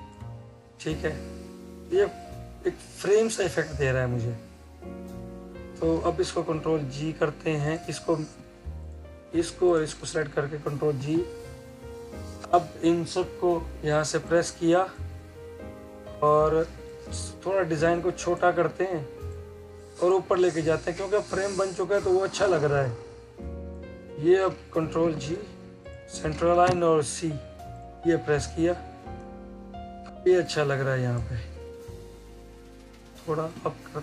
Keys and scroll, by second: 10.9 ctrl+g, 24.9 ctrl+g.